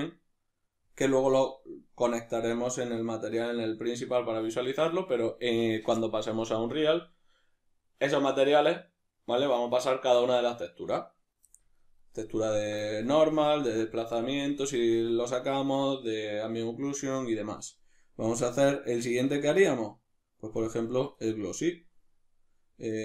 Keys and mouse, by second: 18.4-23.0 drag.